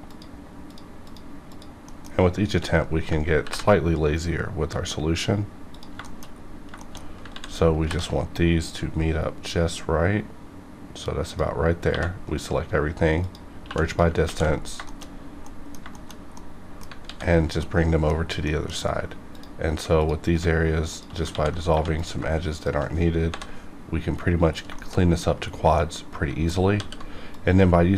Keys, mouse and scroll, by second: 0.1 shift+click, 1.8 shift+middle click, 2.8 scroll up 1, 3.4 ctrl+b, 5.7 click, 6.0 shift+middle click, 6.2-7.0 shift+scroll up 5, 6.7 shift+middle click, 6.8 shift+middle click, 7.3 ctrl+z, 7.8 ctrl+b, 11.9 1, 12.2 right click, 13.2 click, 13.6 2, 13.8 click, 14.2 ctrl+x, 14.4-15.1 ctrl+scroll down 4, 14.8 shift+middle click, 15.4 middle click, 15.9 shift+middle click, 16.3 middle click, 17.0 alt+x, 17.6 middle click, 18.4 middle click, 18.8 scroll up 1, 19.3 click, 20.9 shift+click, 21.3 ctrl+x, 21.7 1, 21.9 click, 22.5 shift+click, 23.3 j, 24.4 scroll down 1, 24.7 shift+middle click, 25.3 scroll down 1, 25.7 middle click, 26.7 w, 27.3 click.